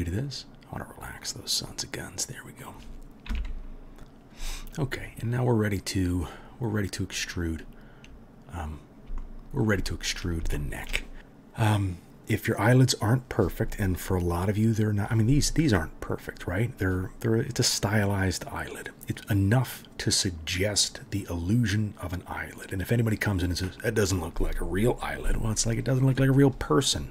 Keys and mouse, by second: 0.2-14.8 drag, 3.3 KP_3, 14.8-27.1 middle drag.